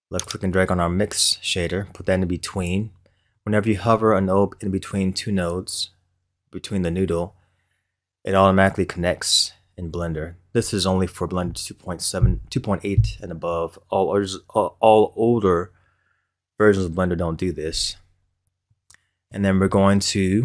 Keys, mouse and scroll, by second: 0.2 click, 3.3-6.4 middle drag, 18.6-20.4 middle drag.